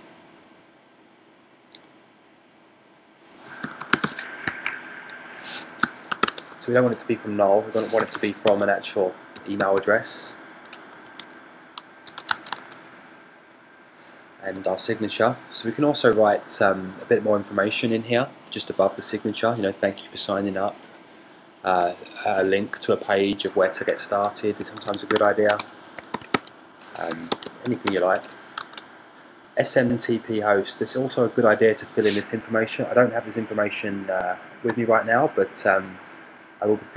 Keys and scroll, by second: 3.9-4.9 typing, 8.2-9.2 typing, 10.4 typing, 11.7 super+a, 12.7 super+c, 12.9 Tab, 13.3 super+v, 25.4 shift+f, 27.0-28.8 typing, 29.2 Tab, 30.4 typing.